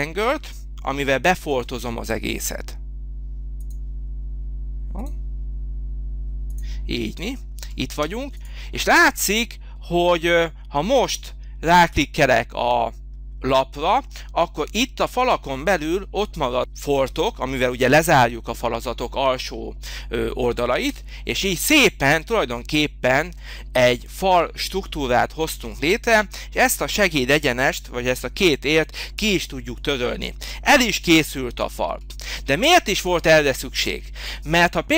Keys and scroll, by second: 1.0 h, 7.9 space, 20.9 Delete, 29.2 Delete, 30.0 Delete.